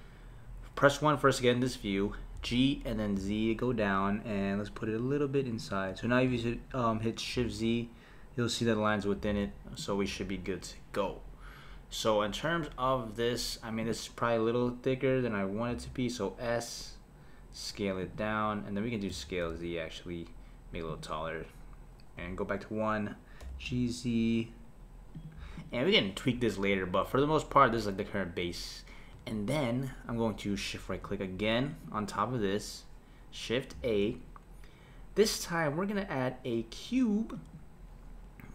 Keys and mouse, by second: 2.4 g, 7.4 shift+z, 9.3 shift+z, 9.8 click, 13.8 click, 15.7 s, 19.1 s, 22.1 KP_1, 23.4 g, 25.6 click, 31.7 shift+right click, 33.7 shift+a.